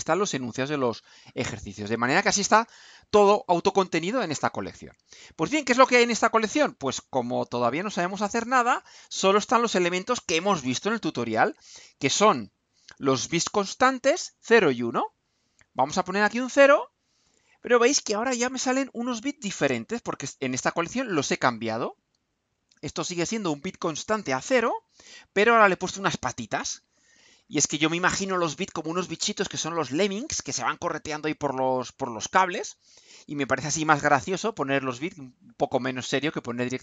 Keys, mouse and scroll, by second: 15.2 click, 17.2 click.